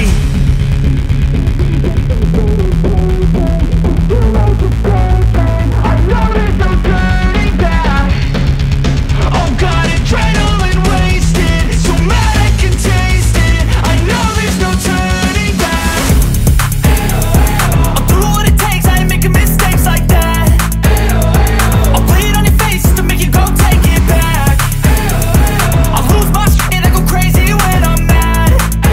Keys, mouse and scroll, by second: 0.1-2.5 drag, 3.2-3.8 click, 4.9-7.4 drag, 7.9-8.5 click, 9.7-11.9 drag, 12.4-13.4 click, 19.6 ctrl+d, 20.3-22.1 drag, 22.5-23.1 click, 22.9 ctrl+d, 23.5-24.2 alt+scroll down 1, 24.7-25.1 alt+scroll up 1, 25.1-27.2 drag, 27.1 ctrl+d, 27.5-28.7 alt+scroll down 1.